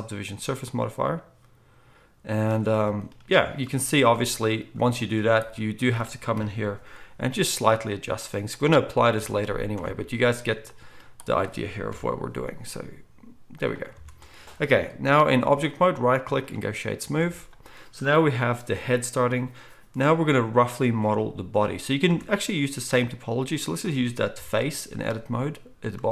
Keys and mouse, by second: 0.2-6.3 drag, 6.3-15.8 middle drag, 6.3 KP_1, 7.3 g, 9.2 Tab, 9.7 Tab, 11.9 KP_1, 12.7 g, 13.9 Tab, 15.8-26.1 right drag, 17.2 alt+a, 22.1 Tab, 24.3 KP_1.